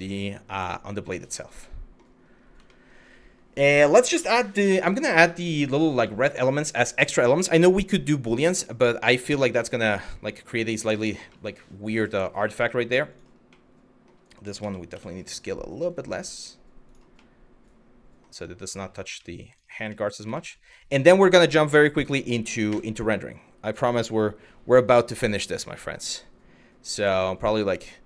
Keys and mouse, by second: 1.2-1.6 middle drag, 2.3 shift+middle drag, 5.0 shift+middle drag, 5.8 middle drag, 11.0-12.0 middle drag, 12.4 middle drag, 12.7 click, 13.2-13.7 middle drag, 14.2 s, 14.5 y, 16.9-17.9 middle drag, 18.9 middle drag, 19.1 click, 19.6 middle drag, 20.0 shift+middle drag, 22.3 KP_1, 26.7-27.1 shift+middle drag.